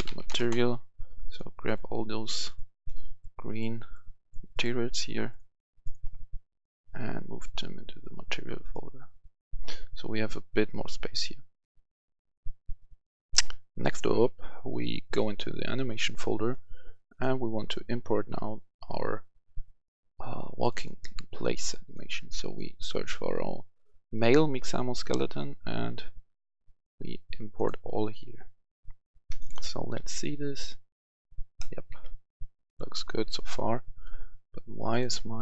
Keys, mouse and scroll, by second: 0.0-0.2 typing, 0.3 Return, 1.2 click, 2.4 ctrl+click, 2.7 ctrl+click, 3.0 ctrl+click, 3.4 ctrl+click, 4.5 ctrl+click, 4.8 ctrl+click, 5.2 ctrl+click, 6.7-8.3 drag, 13.2 F10, 14.9 click, 18.2 scroll down 1, 20.5 click, 31.5-33.6 right drag, 31.8 w, 34.8-35.4 drag.